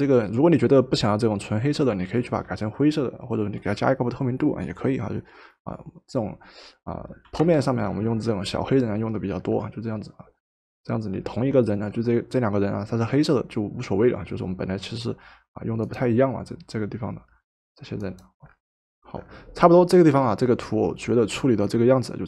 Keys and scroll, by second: 7.3 v.